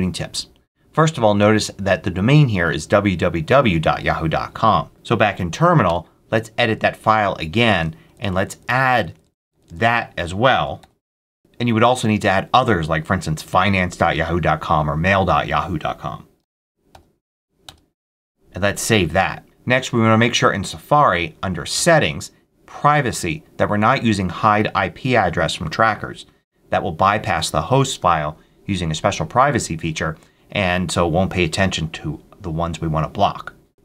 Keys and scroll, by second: 5.4 Up, 5.7 Return, 7.9 Down, 10.1-11.2 typing, 16.3 ctrl+x, 16.8 ctrl+y, 17.4 y, 17.5 Return.